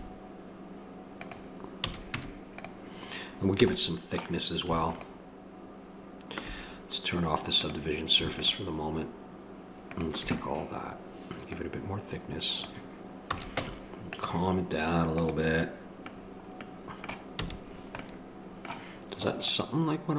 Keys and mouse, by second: 1.8 a, 2.1 Tab, 2.6-3.6 drag, 3.6 a, 5.2-6.5 drag, 7.6-12.6 drag, 13.3 a, 13.6 Tab, 15.8-16.8 drag, 17.4 a.